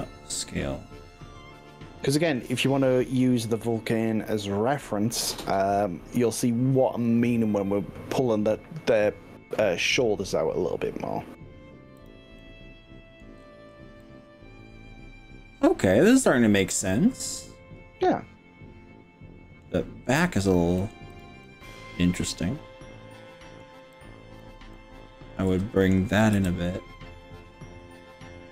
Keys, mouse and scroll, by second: 0.3-1.1 scroll up 3, 1.5 scroll down 2, 4.3-4.7 scroll down 2, 5.9-6.9 scroll down 3, 9.3-9.7 scroll up 2, 10.1 scroll up 1, 12.1 click, 12.4-13.1 middle drag, 13.3-13.9 scroll down 4, 14.1-19.6 middle drag, 19.9-20.5 scroll up 4, 20.8 middle click, 21.1 click, 21.4-23.5 middle drag, 23.9 click, 24.7 middle click, 25.7 click, 26.4 g.